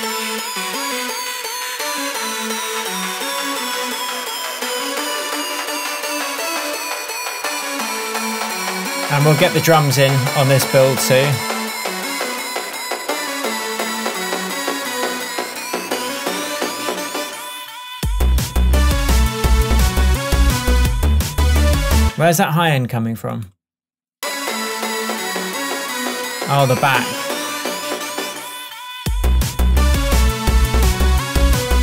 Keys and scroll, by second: 22.1 space.